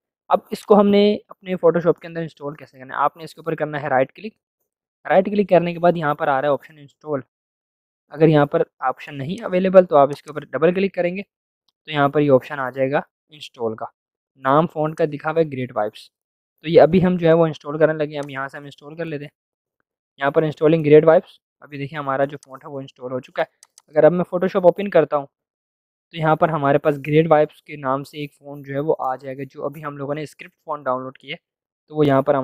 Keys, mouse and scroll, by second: 3.5 right click, 9.3 click, 10.4 click, 14.8-17.7 drag, 18.3 click, 22.3 click.